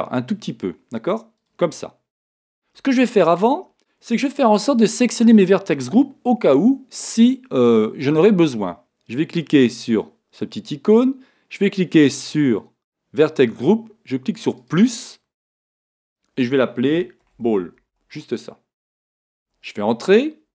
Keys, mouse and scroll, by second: 14.8-20.5 drag, 19.5 l.